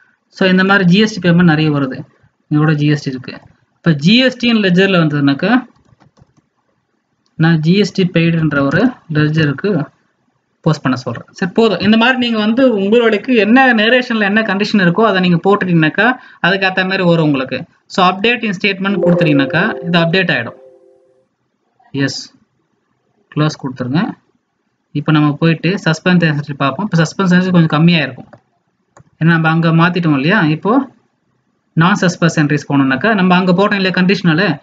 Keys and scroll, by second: 3.4 alt+Tab.